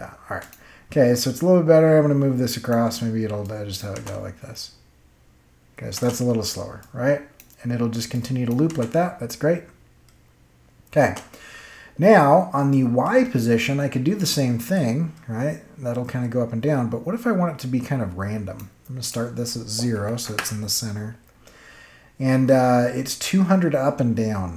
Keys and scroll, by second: 3.9 space, 5.9 space, 8.6 space, 10.9 space, 20.0 0, 20.2 Return.